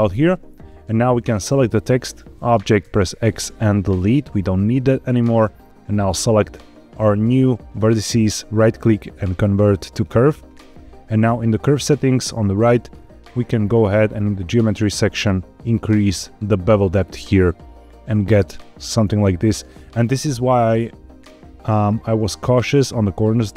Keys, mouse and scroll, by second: 1.3 click, 2.7 x, 5.9 click, 6.9-7.4 shift+middle drag, 8.3-10.0 right drag, 11.7 click, 12.8-13.8 scroll down 3, 13.9 click, 14.4 scroll down 2, 15.8-19.6 shift+drag, 21.1 scroll up 3, 21.8-22.2 shift+middle drag, 23.3-23.5 shift+middle drag.